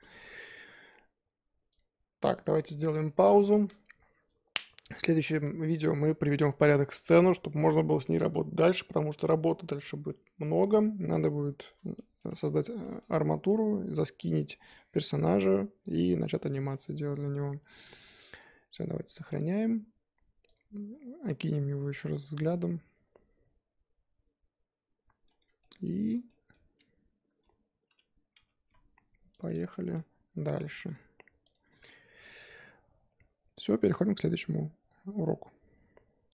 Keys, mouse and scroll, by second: 0.7-1.7 middle drag, 1.7 click, 2.4 click, 2.5-3.0 scroll down 12, 3.0-12.3 middle drag, 12.3 scroll up 4, 12.8-16.7 shift+middle drag, 16.7 scroll down 4, 16.9-20.5 middle drag, 20.5 click, 20.8-21.9 scroll up 5, 22.1 click, 22.5-25.4 middle drag, 25.4 scroll down 3, 25.6-26.1 middle drag, 26.1 click, 26.3-28.5 middle drag, 28.5 g, 29.5 click, 29.7 middle click, 30.1-36.3 scroll up 1.